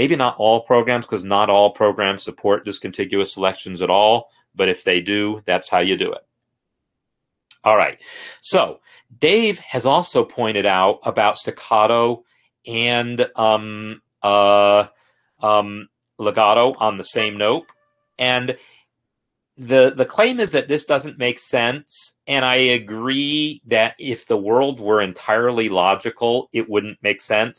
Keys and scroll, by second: 17.9 shift+n, 18.6 Escape.